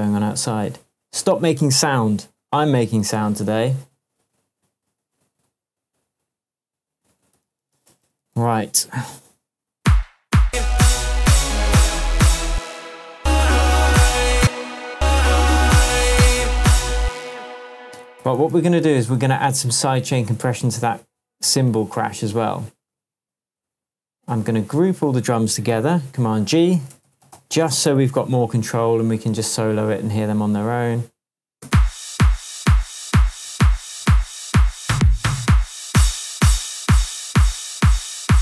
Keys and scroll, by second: 7.4 super+d, 9.0 super+space, 12.5 space, 14.3 space, 16.9 space, 18.2 super+d, 21.7 super+c, 22.9 super+v, 25.7 shift+super+g, 26.4 super+g, 26.7 super+r, 27.0 shift+super+d, 27.1-28.1 typing, 28.8 Return, 31.6 space, 33.4 super+l.